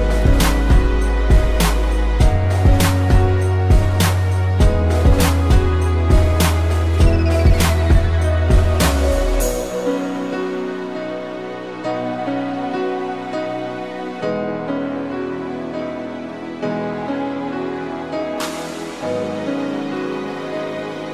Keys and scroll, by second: 5.4 space, 9.4 space, 15.7 space.